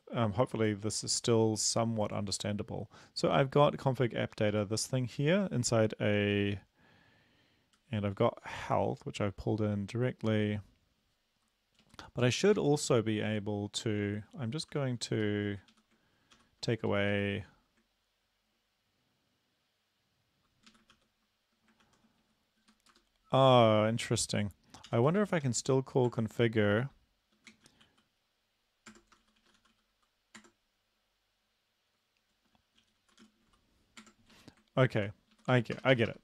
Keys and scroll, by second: 4.1 Up, 4.3 Up, 4.6 Up, 7.9 Down, 8.1 Down, 8.3 Left, 11.8 Down, 12.4 Right, 12.6 Right, 14.7 Return, 15.1 Up, 15.5 Up, 15.8 Up, 16.4 ctrl+/, 16.9 Down, 17.1 Down, 20.7 Up, 20.9 ctrl+/, 21.9 ctrl+/, 22.3 Down, 22.6 End, 22.9 Return, 24.9-25.4 typing, 26.1 Tab, 27.6-27.9 typing, 28.9 Tab, 29.2-29.6 typing, 30.4 Tab, 32.8-33.4 typing, 34.1 Tab, 34.3 Right, 35.0 Left, 35.4 Right, 35.5 Right, 35.8-36.2 typing.